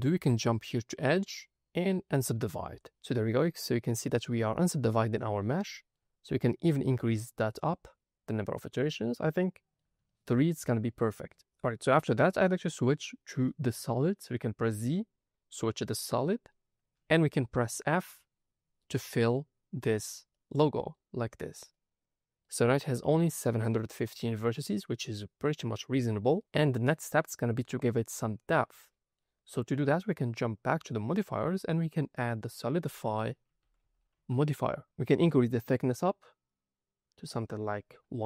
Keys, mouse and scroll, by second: 0.8-2.7 drag, 2.9-3.3 scroll up 2, 5.1 scroll up 1, 5.1 scroll down 2, 5.7 shift+middle click, 7.6 click, 8.9 scroll down 2, 9.3 shift+middle click, 10.0 shift+middle click, 11.8 middle click, 13.0-13.4 scroll down 2, 13.4-14.6 middle drag, 14.6 z, 17.0 middle click, 17.5 scroll up 2, 19.6 f, 20.2 middle click, 21.1 scroll down 2, 21.7-24.3 middle drag, 26.8 middle click, 27.5 scroll up 1, 27.9 middle click, 29.4-30.5 scroll down 1, 31.9-34.8 drag, 35.8-37.3 drag, 37.6-38.2 drag.